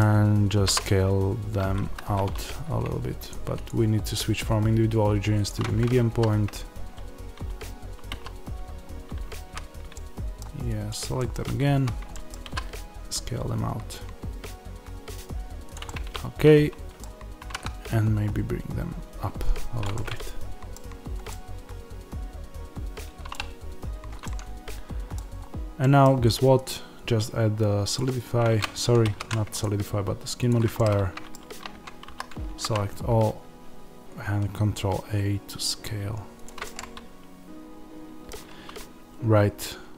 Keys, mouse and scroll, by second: 0.6 s, 1.9 Escape, 3.2 click, 9.5 click, 9.5 z, 9.8 middle click, 10.8 click, 11.1-15.6 middle drag, 11.7 z, 12.4 s, 15.6 click, 15.7-19.7 middle drag, 17.3 g, 19.7 click, 19.8-27.8 middle drag, 20.8 scroll down 1, 23.6 Tab, 25.2-25.7 scroll up 1, 27.8-30.6 drag, 29.0 ctrl+z, 30.6-31.6 middle drag, 31.6 Tab, 32.0 a, 32.5 ctrl+a, 36.4 click, 36.5 middle click, 38.4 Tab, 39.9 middle click.